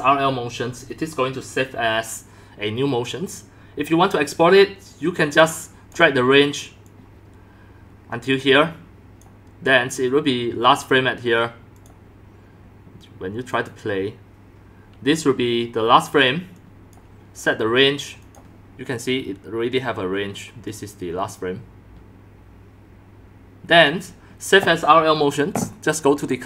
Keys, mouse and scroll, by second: 1.7-3.0 drag, 5.2 click, 5.9-8.3 drag, 13.5 click, 14.9-15.6 drag, 16.6 click, 18.2 click, 18.5 drag, 18.8 click, 20.6-21.6 drag, 21.7-23.4 drag, 23.8 click, 24.2 click, 26.2 click, 26.3-26.4 drag.